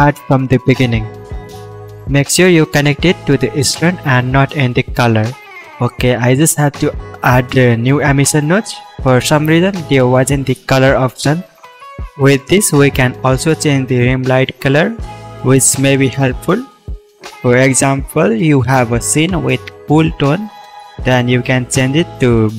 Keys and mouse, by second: 2.6 x, 3.2 shift+a, 6.9-11.0 drag, 12.4 click, 16.9 click, 20.9 click, 21.5 shift+a.